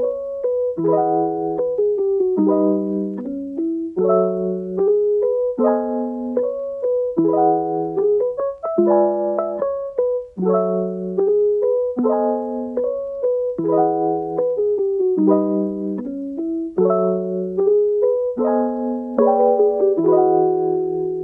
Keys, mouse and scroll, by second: 0.3-0.8 middle drag, 0.8 g, 1.9 click, 2.2 g, 3.4-5.5 middle drag, 5.5 click, 5.9 g, 7.6 a, 8.9 ctrl+t, 10.5 scroll down 1, 10.7-11.8 middle drag, 11.8 Tab, 12.2-12.6 middle drag, 12.6 scroll up 3, 12.9-14.1 middle drag, 14.1 shift+d, 15.4 s, 18.6 shift+d, 19.7-20.3 middle drag, 20.3 s.